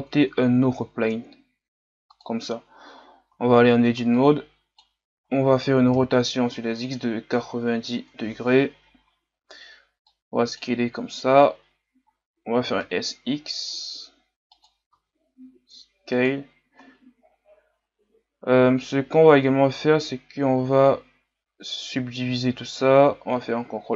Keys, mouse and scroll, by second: 2.2 shift+a, 3.3 Tab, 4.2-5.2 drag, 5.2-5.9 scroll up 4, 6.0 r, 9.0-9.4 scroll up 4, 10.1-11.6 drag, 11.6-12.1 scroll up 3, 12.6 s, 15.0 s, 17.3 scroll up 2.